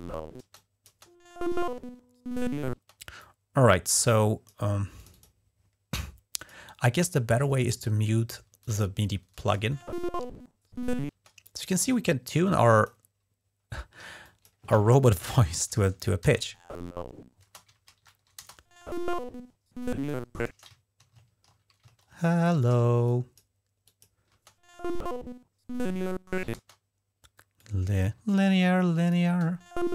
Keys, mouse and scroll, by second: 0.3 click, 2.5 space, 3.0-4.4 drag, 4.8 click, 6.1 click, 8.4 click, 9.2 space, 11.2 click, 11.2 space, 12.1-12.7 drag, 13.8 typing, 14.0 click, 15.2 alt+Down, 15.5 alt+Down, 16.1 space, 17.2 space, 17.7 alt+Up, 17.8 alt+Up, 18.2 space, 20.3 space, 21.0 ctrl+scroll down 1, 21.7 ctrl+scroll up 1, 22.3-22.8 typing, 22.8 click, 23.6 click, 24.1 typing, 26.3 space, 27.4-28.9 drag, 29.0 typing.